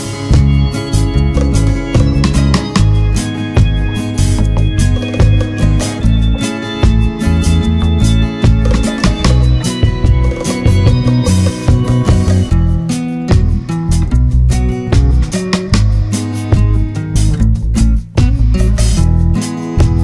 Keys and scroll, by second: 18.7 ctrl+z.